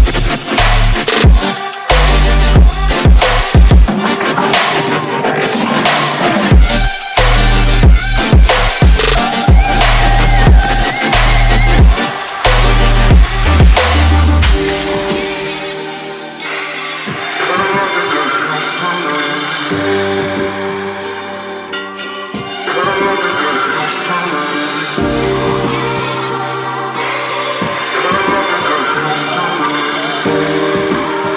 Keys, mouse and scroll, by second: 0.8 KP_2, 1.1 KP_0, 1.6 Return, 2.2 click, 3.8 F10, 5.0 click, 12.5 click, 13.0-14.2 typing, 13.6 click, 18.6 F10, 19.2 click, 25.1 KP_5, 25.3 KP_0, 26.0 Return, 27.1 click, 27.2 F10, 28.1 click.